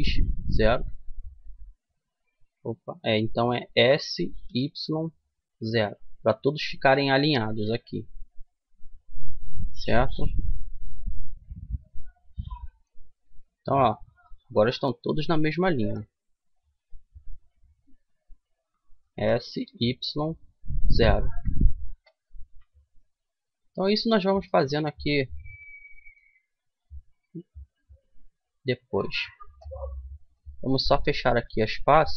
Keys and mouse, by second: 1.5 ctrl+z, 3.4 s, 6.6-8.5 middle drag, 13.2 KP_3, 15.0 a, 16.5-19.4 right drag, 18.7 s, 22.1 a, 24.3 middle click, 25.8 middle click, 26.4-29.7 right drag, 28.9 f, 30.3-32.1 right drag.